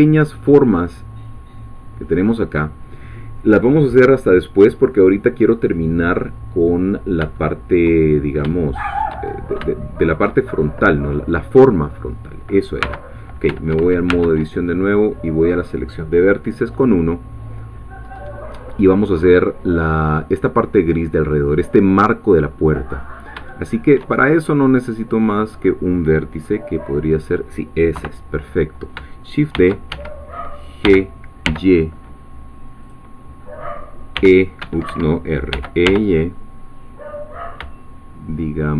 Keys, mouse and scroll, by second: 6.7-7.1 scroll down 2, 7.4 shift+middle click, 8.1-8.4 shift+scroll up 3, 8.6 shift+middle click, 9.3 shift+scroll up 2, 9.7 shift+middle click, 10.4-12.8 shift+scroll down 3, 12.8 1, 13.5 Tab, 17.7-19.9 scroll up 4, 19.9 scroll down 2, 22.7-23.2 scroll up 4, 23.5 shift+middle click, 25.0 click, 26.5-27.9 middle drag, 27.9 3, 29.5 shift+d, 29.9 Escape, 30.8 g, 32.8-34.1 drag, 34.1 r, 34.6 Escape, 35.5 e, 35.8 y.